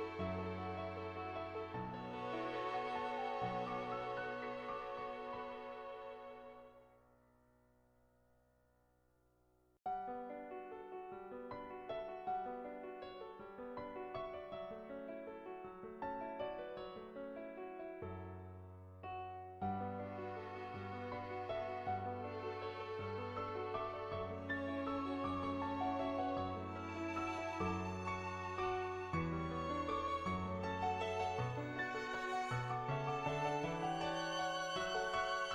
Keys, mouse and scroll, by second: 2.1 click, 2.7 click, 7.4 click, 10.2 click, 10.9 click, 11.6 click, 12.6 click, 13.1 middle click, 13.6 click, 14.5 middle click, 14.9 click, 15.3 middle click, 15.9 n, 16.1 shift+middle click, 16.6 shift+middle click, 17.1 click, 17.8 Tab, 18.2 middle click, 18.7 shift+middle click, 18.9 shift+middle click, 19.1 middle click, 20.2 click, 20.9 click, 21.2 ctrl+z, 22.1 click, 22.6 ctrl+z, 22.9 click, 23.5 click, 23.8 click, 24.1 ctrl+z, 24.5 click, 25.3 click, 26.5 click, 27.2 click, 27.7 ctrl+z, 28.0 click, 29.2-35.5 drag.